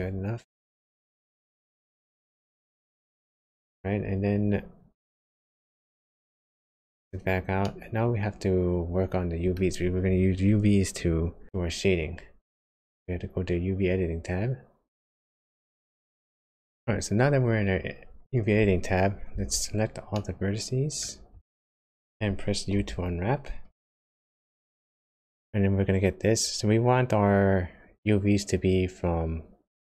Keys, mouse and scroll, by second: 0.0 middle click, 5.5 Tab, 6.1 Tab, 6.7 Tab, 7.6 middle click.